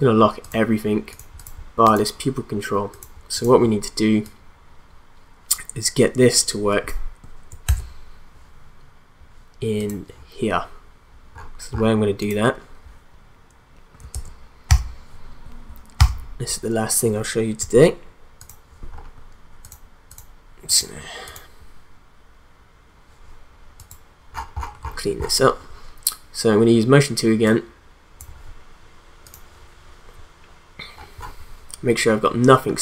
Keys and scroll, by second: 7.6 ctrl+z, 14.1 ctrl+a, 14.7 u.